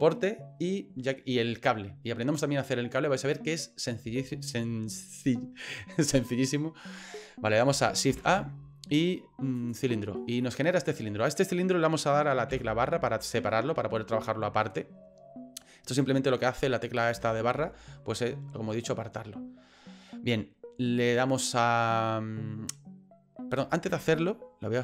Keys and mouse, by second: 3.6 middle click, 4.2 shift+middle click, 8.1 shift+a, 10.5 click, 12.5 KP_Divide, 14.2-15.6 middle drag, 17.1 KP_Divide, 17.6 KP_Divide, 23.6 right click.